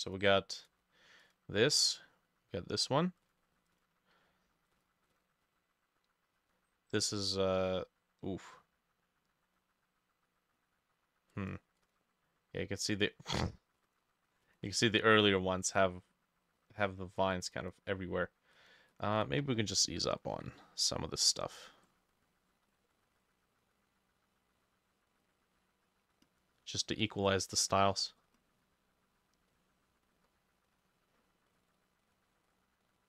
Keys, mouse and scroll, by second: 5.1-7.1 drag, 11.8-13.8 drag, 17.6-33.0 drag, 19.9 b, 20.4 e.